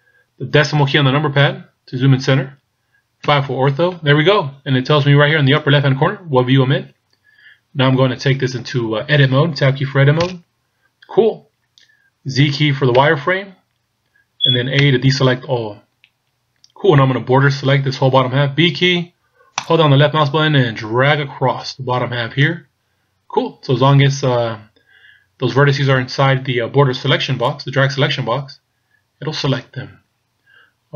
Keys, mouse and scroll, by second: 1.4 KP_Decimal, 3.2 KP_5, 10.2 Tab, 12.9 z, 14.9 a, 18.7 b, 27.1 b.